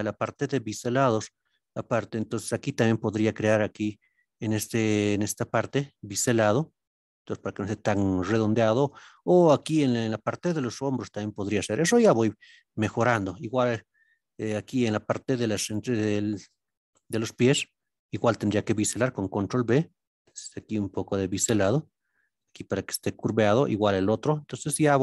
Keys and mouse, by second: 0.0 click, 1.0-3.1 middle drag, 9.0 click, 13.4-14.0 middle drag, 16.3-18.2 middle drag, 19.1 ctrl+b, 21.5 click, 22.0 middle click, 24.0 alt+click.